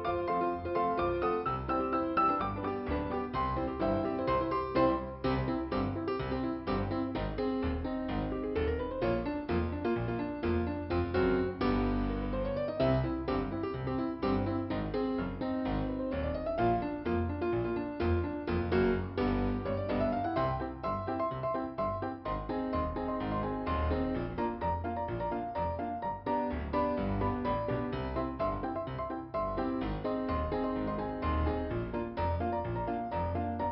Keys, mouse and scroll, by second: 0.6 click, 3.9 scroll down 2, 7.6 middle click, 9.3 click, 10.1 click, 12.1 click, 14.7 click, 16.7 click, 20.6 middle click, 21.5 click, 32.8 ,, 33.4 click.